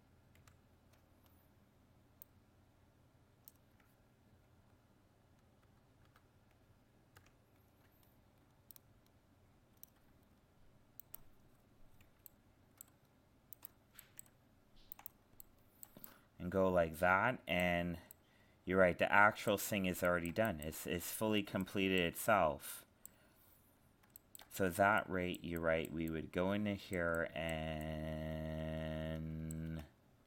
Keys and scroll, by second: 0.4 ctrl+-, 5.6 ctrl++, 7.2 ctrl+-.